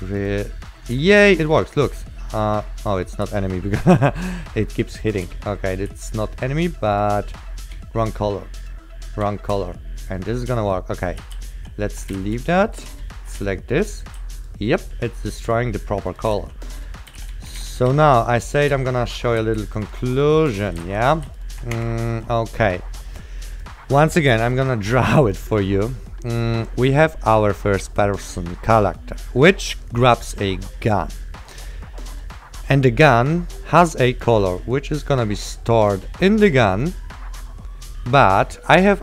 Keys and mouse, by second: 0.0-1.6 typing, 0.3 click, 3.4 w, 5.2 click, 5.4 d, 6.0 w, 7.1 click, 7.9 a, 8.7 click, 9.4 a, 9.8 d, 10.1 click, 11.1-13.5 typing, 14.0 click, 15.2 click, 15.8-21.9 typing, 16.2 click, 16.7 click, 18.5 click, 19.0 click, 19.4 click, 20.0 click, 20.1 click, 20.3 click, 21.4 click, 21.6 click, 21.9 Escape, 23.6 click, 38.9 click.